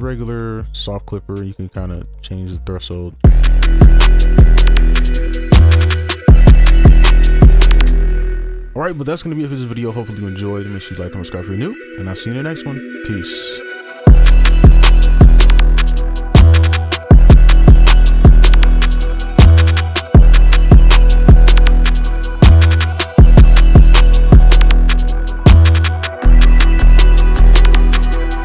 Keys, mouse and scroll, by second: 3.2 space, 7.9 space.